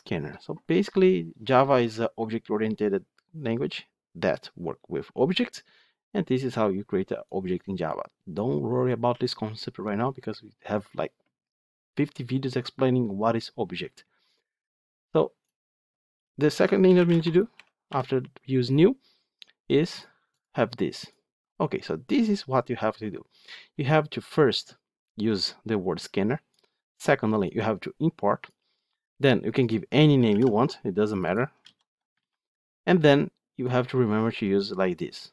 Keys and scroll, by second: 31.5 ctrl+z.